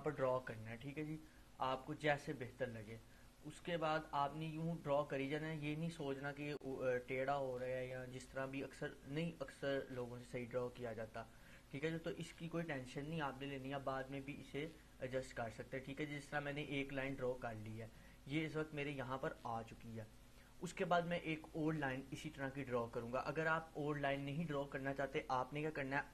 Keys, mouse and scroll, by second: 0.0 ctrl+z, 1.1-2.7 drag, 4.9-6.4 drag, 8.8-10.6 drag.